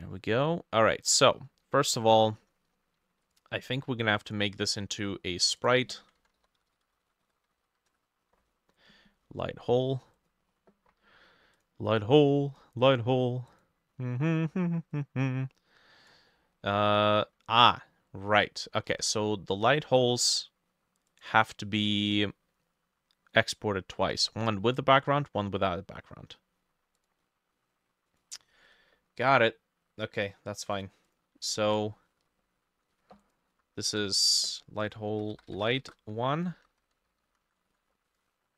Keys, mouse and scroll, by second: 1.0-1.6 scroll down 1, 5.6-9.9 drag, 6.2-8.2 typing, 6.2 ctrl+middle click, 7.0 shift+middle click, 10.5-12.6 scroll up 3, 14.0-15.1 scroll down 1, 15.1 scroll down 1, 16.3 middle click, 16.7-18.8 scroll up 4, 18.9 ctrl+z, 22.0-23.6 scroll up 1, 31.1-35.1 drag, 31.4 ctrl+middle click, 31.7 ctrl+alt+e, 33.6 F2, 34.9-36.4 typing, 36.6 shift+Left, 36.8 shift+Left, 36.9 shift+Left, 37.0 shift+Left, 37.2 shift+Left, 37.3 shift+Left, 37.7 ctrl+c, 37.8 typing.